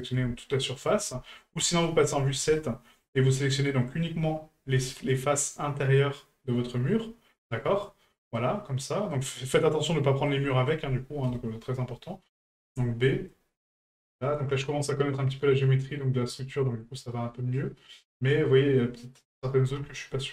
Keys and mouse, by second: 0.8 ctrl+right click, 2.6-3.0 shift+middle drag, 8.4-9.1 middle drag, 10.3-10.7 middle drag, 17.9-18.6 middle drag.